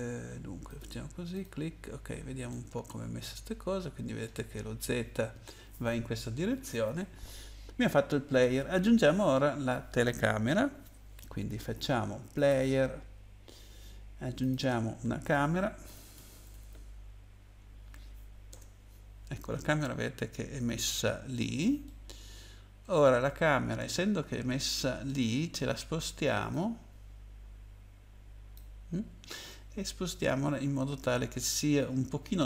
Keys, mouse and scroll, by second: 0.7 click, 1.3 click, 2.1 scroll down 1, 2.5 middle click, 12.3 click, 14.4 click, 15.6-17.9 typing, 18.5 Return, 19.8-20.3 scroll down 2, 21.8 middle click, 26.5 click, 29.0-30.2 scroll down 2, 29.5 middle click.